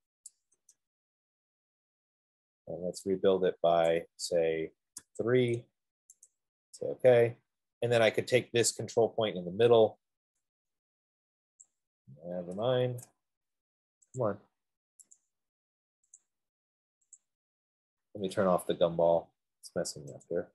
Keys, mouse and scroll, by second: 0.0-0.5 typing, 4.4 typing, 7.0 click, 7.1 click, 9.0 click, 11.2 F15, 11.9 click, 13.0 ctrl+z, 14.5 click, 15.5 click, 16.5 click, 17.6 click.